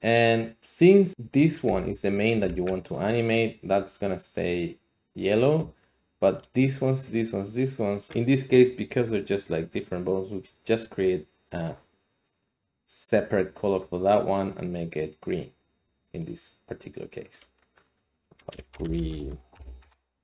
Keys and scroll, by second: 1.6 g, 2.4 Escape, 18.6-19.5 typing, 19.8 Return.